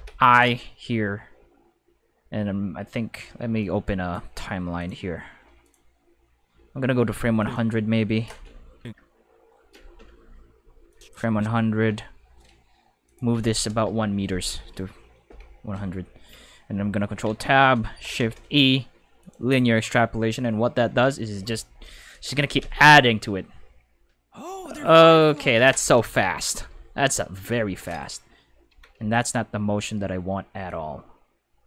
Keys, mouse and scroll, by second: 3.6 click, 4.7 click, 5.6 click, 7.4 click, 10.9 click, 13.0 click, 13.4 5, 13.7 Return, 13.8 5, 15.2 5, 17.0 ctrl+Tab, 17.9-18.7 typing, 19.2 click, 20.9 Tab, 20.9 s, 22.6 space, 22.7 s, 25.3 space, 25.5 s, 28.0 right click, 28.4-29.4 typing, 29.1 click, 30.7 click.